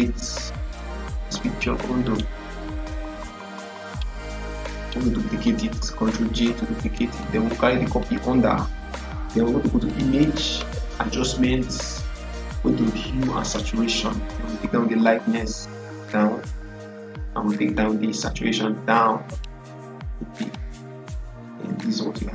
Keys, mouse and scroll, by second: 1.9 right click, 3.0 click, 3.7 right click, 3.8 right click, 5.3 click, 6.2 ctrl+j, 7.1 click, 7.1-9.8 drag, 13.3 click, 13.3-22.3 drag.